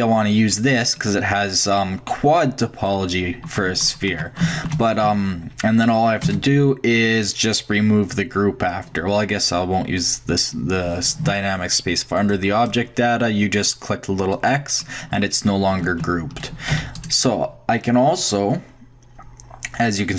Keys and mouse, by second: 3.5-4.5 middle drag, 4.1 Tab, 5.0 x, 6.2 space, 12.2-14.0 drag, 14.1 middle click, 14.3-16.2 drag, 16.7 shift+x, 17.8 middle click, 18.2-20.0 drag.